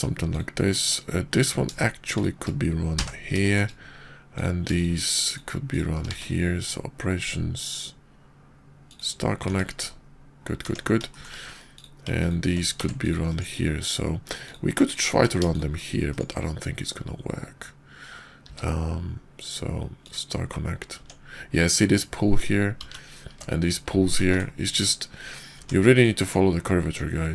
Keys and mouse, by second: 0.3 shift+click, 1.4 click, 2.0 shift+click, 3.0 j, 3.4 shift+click, 4.3 click, 4.7 shift+click, 5.2 shift+click, 5.7 shift+click, 9.4 Tab, 10.6 Tab, 11.1 shift+drag, 11.6 click, 12.0 ctrl+click, 12.8 Tab, 13.0 click, 13.2 click, 14.4 click, 15.4 shift+click, 16.1-17.7 drag, 18.4 q, 21.0 Tab, 24.4 ctrl+z, 24.4 ctrl+z, 25.5 Tab, 25.9 click, 26.1-27.3 drag.